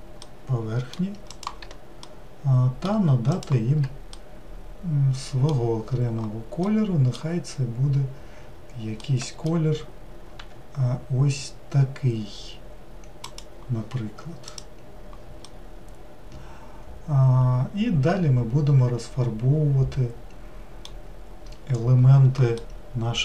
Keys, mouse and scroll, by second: 0.3-1.5 middle drag, 1.5 shift+click, 2.1-3.5 middle drag, 3.5 shift+click, 4.3-10.4 middle drag, 10.4 g, 14.6 click, 15.5-19.1 middle drag, 22.7-23.2 middle drag.